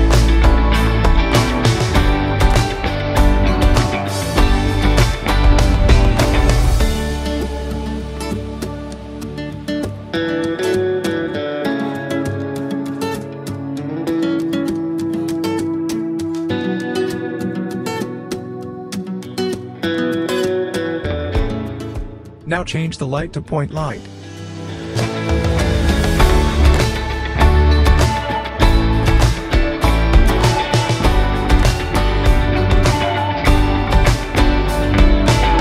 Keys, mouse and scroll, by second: 0.0-1.8 scroll up 1, 1.8 click, 5.1-6.0 scroll down 1, 6.0 click, 8.5-8.9 scroll down 1, 8.9-9.4 scroll up 1, 10.2-10.7 scroll down 1, 11.0-11.6 click, 11.8-13.1 scroll down 1, 13.1 click, 13.6-14.8 scroll up 1, 14.8 click, 15.3 w, 17.8-18.3 scroll down 1, 19.1-25.3 drag, 27.6-28.4 typing, 28.4 click, 31.1-33.0 drag, 31.1 typing.